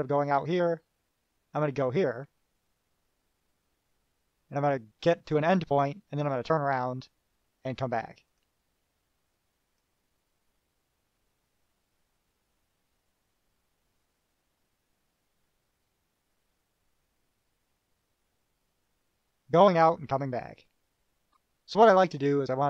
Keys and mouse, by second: 8.5 click, 9.7 click, 20.1 click, 22.4 right click.